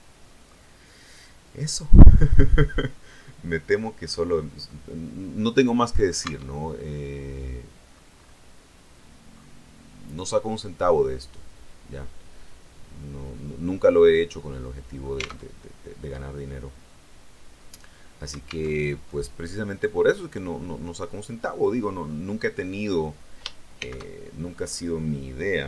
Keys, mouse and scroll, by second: 3.1 middle click, 3.9-4.6 scroll down 3, 4.6-6.2 middle drag, 6.2 Tab, 6.6-8.0 middle drag, 8.0-8.3 scroll up 1, 9.2 scroll down 2, 10.8-15.3 middle drag, 15.3 alt+Tab, 18.6 alt+Tab, 19.4 middle click, 20.5-21.2 scroll up 2, 21.2 middle click, 21.9-22.5 scroll down 2, 23.6 shift+c, 24.4-25.0 scroll up 2.